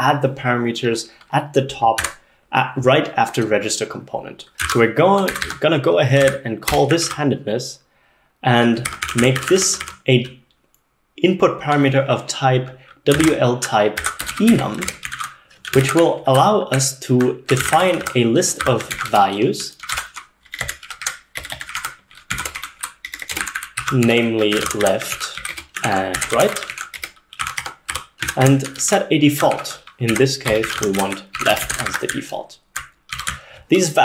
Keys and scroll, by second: 2.0 b, 4.4-7.5 typing, 8.7-10.2 typing, 12.9-34.0 typing, 19.9 ctrl+alt+7, 20.0 ctrl+alt+0, 20.9 ctrl+alt+9, 21.0 ctrl+alt+8, 21.7 ctrl+alt+8, 21.8 ctrl+alt+9.